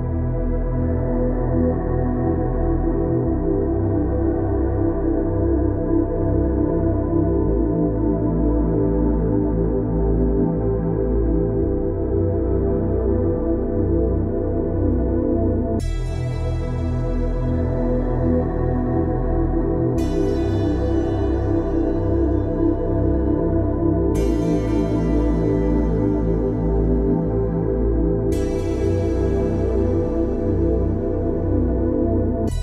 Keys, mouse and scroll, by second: 1.0 ctrl+space, 1.2 ctrl+click, 1.4 ctrl+space, 3.1 click, 3.5 space, 4.1 ctrl+click, 4.3 ctrl+space, 5.3 click, 6.1 ctrl+space, 6.5 ctrl+click, 6.6 ctrl+space, 8.3 click, 8.6 space, 11.5 click, 15.0 click, 19.1 click, 23.8 click, 27.8 ctrl+space, 27.8 ctrl+click, 28.2 ctrl+space, 28.8 click, 29.3 space, 31.6 click.